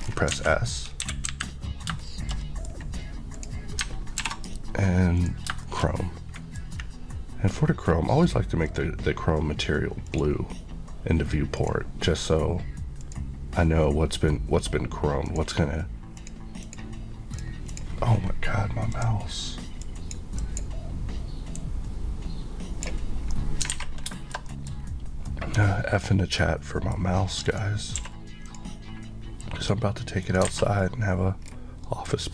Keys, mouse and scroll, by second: 0.0 scroll down 1, 0.3 alt+a, 1.0 KP_1, 1.3 KP_3, 2.1 shift+middle click, 2.7 scroll up 1, 3.4 click, 4.2 alt+m, 5.2 click, 5.7 middle click, 8.7 click, 10.1 click, 10.2 click, 11.6 click, 11.7 click, 13.1 click, 15.4 click, 15.4 click, 16.2 click, 16.8 click, 17.4 click, 19.1 click, 19.9 click, 19.9 click, 20.4 click, 21.6 click, 21.7 click, 23.4 middle click, 23.8 alt+a, 24.2 shift+middle click, 24.5 middle click, 24.7 middle click, 25.3 middle click, 27.5 click, 27.6 Left, 28.0 q, 28.5 click, 30.5 alt+a, 30.9 middle click, 31.5 scroll down 1, 31.9 middle click, 32.2-32.3 scroll down 1.